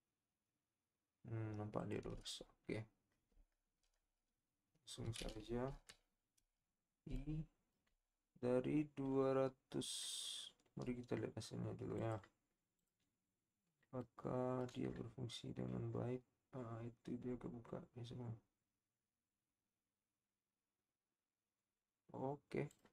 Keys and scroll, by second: 5.7 i.